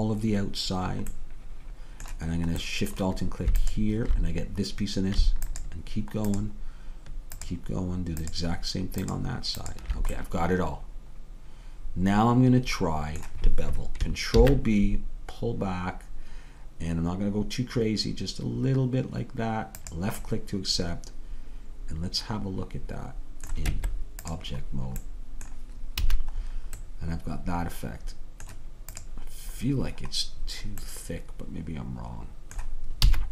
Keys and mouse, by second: 4.9-11.6 drag, 10.2-13.2 middle drag, 14.4 ctrl+b, 20.4-22.1 middle drag, 23.7 Tab, 26.0 a, 29.3-30.5 drag, 30.5-31.7 middle drag, 31.8 middle click, 33.1 s.